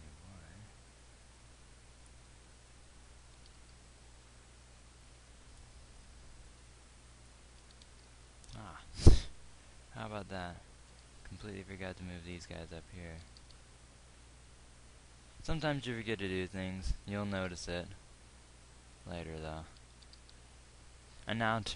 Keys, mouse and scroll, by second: 3.7 g, 7.6-11.4 drag, 8.3 g, 11.4 g, 18.3 g, 20.5 g.